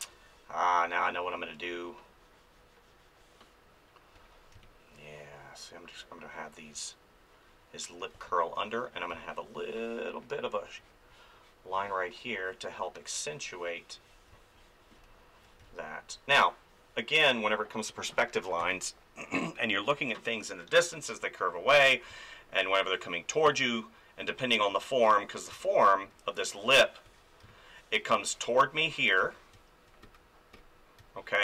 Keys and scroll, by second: 4.1 ctrl+z, 4.5 space, 8.1 space, 11.7 space, 14.3 space, 15.6 space, 18.6 ctrl+s, 22.1 space, 25.5 space, 27.0 ctrl+z, 27.4 space, 29.2 ctrl+z, 29.5 space, 30.0 ctrl+z, 31.0 space.